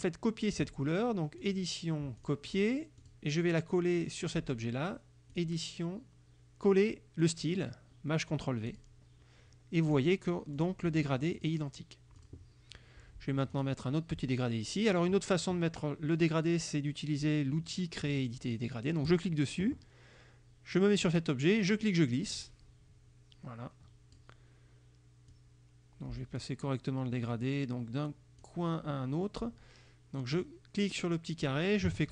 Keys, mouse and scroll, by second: 1.5 click, 2.2 click, 3.1 click, 5.4 click, 8.7 click, 9.9 click, 10.6 click, 11.4 click, 12.2 click, 13.6 click, 19.2 click, 21.7-24.4 drag, 25.4-26.7 drag, 27.4-28.7 drag, 30.4 click.